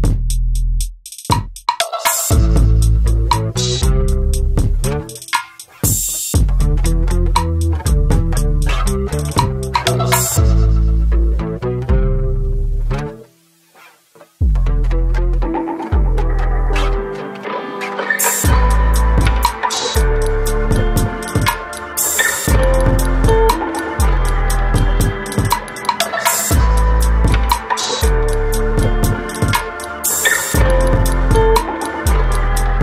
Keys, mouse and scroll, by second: 2.1 click, 3.9 click, 4.7 middle click, 5.6 middle click, 5.9 middle click, 6.5 typing, 7.0 middle click, 7.3-7.6 scroll up 1, 7.8 click, 10.4 click, 13.3 click, 16.0 n, 18.4 click, 20.8 p, 21.6 alt+middle click, 22.3 middle click, 22.7-23.3 scroll down 2, 23.3 middle click, 23.7-24.3 scroll up 2, 24.3 click, 25.7 Delete, 25.7 typing, 26.2 middle click, 26.3 scroll down 2, 26.8 middle click, 27.3 scroll down 2, 28.0 click, 28.7 click, 29.2-29.6 scroll up 2, 29.3 middle click, 29.6 middle click, 29.6 scroll down 1, 29.9 middle click, 30.8-31.6 scroll down 3, 31.2 middle click, 31.9 click, 32.3 click.